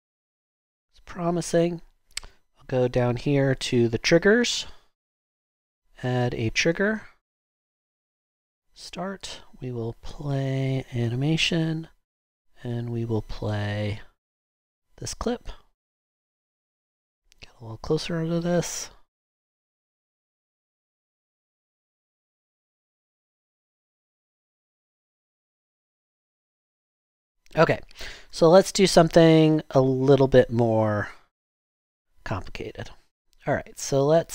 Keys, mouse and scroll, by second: 28.1 super+Tab, 28.2 super+Tab.